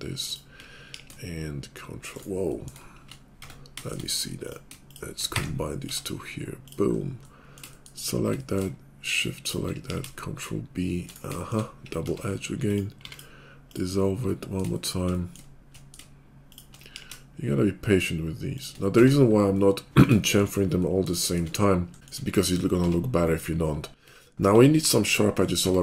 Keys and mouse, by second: 0.2 shift+middle click, 0.9 ctrl+b, 3.0-7.1 middle drag, 3.4 Tab, 5.4 1, 5.9 Tab, 9.8 ctrl+b, 12.0 Tab, 12.9 x, 14.6 shift+click, 15.2-24.5 shift+middle drag, 16.4 shift+click, 16.9 ctrl+b, 19.0 Tab, 22.8 Tab, 24.0 Tab, 24.5 Tab, 25.7 Tab.